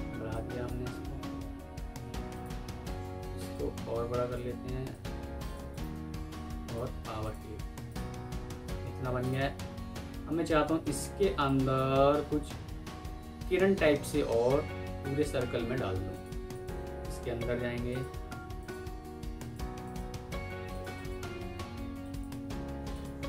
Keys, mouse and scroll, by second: 5.6 right click, 8.2 alt+scroll down 1, 8.5 alt+scroll up 1, 9.1 alt+click, 11.8 Escape, 16.4 ctrl+click, 19.7 double click.